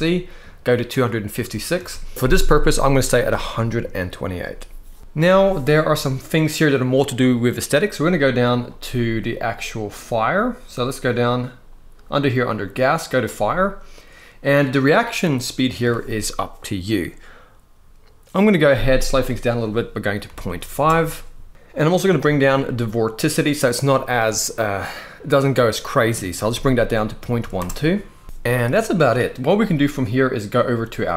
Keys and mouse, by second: 1.5 ctrl+z, 12.8 click, 19.2-20.5 drag, 21.9-27.4 drag.